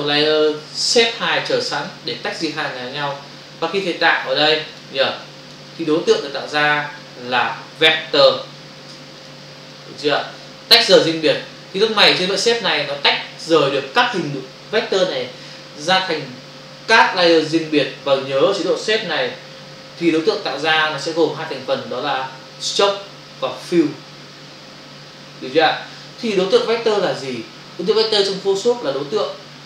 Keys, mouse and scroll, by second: 1.9 click, 3.2 click, 4.1 click, 5.3 click, 5.8 click, 7.2 click, 8.9 v, 9.2 click, 9.6 click, 11.3 click, 12.0 click.